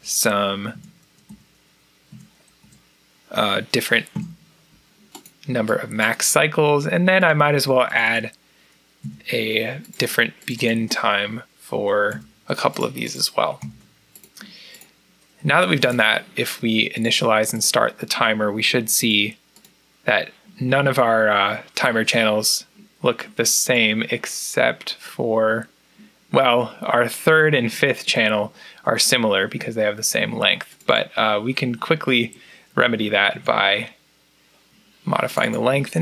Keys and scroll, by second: 0.6 3, 0.9 Down, 1.2 Down, 2.0 4, 2.6 Down, 4.0 3, 9.0 1, 12.0 3, 13.4 4, 33.2 3, 35.8-36.0 typing.